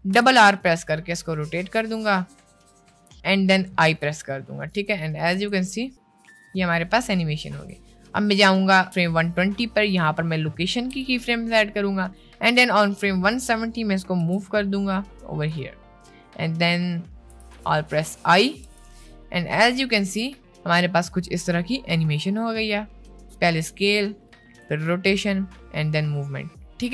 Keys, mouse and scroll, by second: 0.1 r, 3.9 i, 4.7-5.3 drag, 5.5 space, 7.5 space, 8.4 click, 10.9 i, 12.2-13.3 drag, 14.3 g, 16.9 middle click, 17.5 g, 18.6 i, 19.6-20.6 drag, 20.6 space, 21.0 middle click, 21.6 middle click, 22.8 middle click, 23.2 middle click, 23.6 middle click, 24.4 middle click.